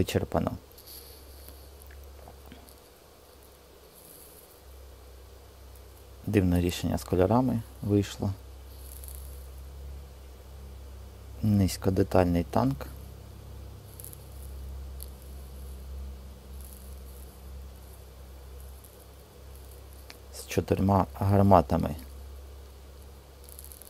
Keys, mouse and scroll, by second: 6.5 Tab, 11.5 middle click.